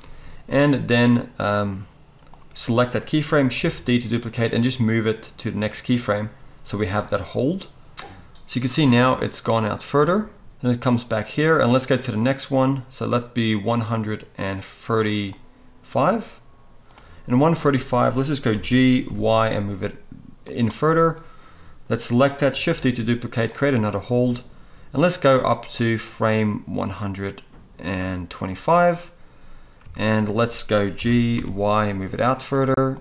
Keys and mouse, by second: 2.3-6.6 drag, 3.6 shift+d, 6.6 middle click, 7.1-17.6 drag, 17.6-21.9 middle drag, 18.5 g, 21.9-23.6 drag, 22.7 shift+d, 23.6-25.8 middle drag, 25.8-32.4 drag, 30.9 g, 32.4 middle click, 32.9-33.0 drag.